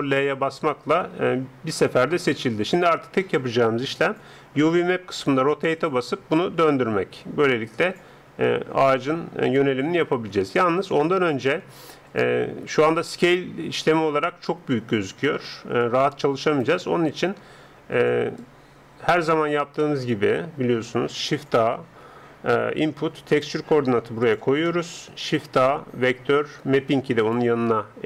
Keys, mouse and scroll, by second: 5.3 r, 15.8-21.8 drag, 21.8 shift+a, 25.1 click, 25.3 shift+a.